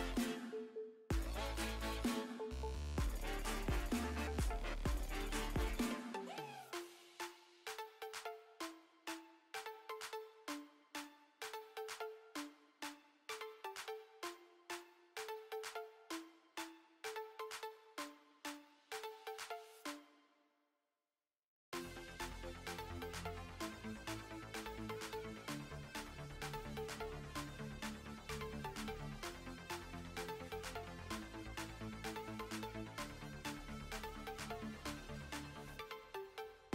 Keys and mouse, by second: 0.5-3.1 middle drag, 8.2-15.5 middle drag, 17.2-18.7 middle drag, 26.4 Tab, 27.0 Tab, 27.2 click, 29.7 ctrl+s.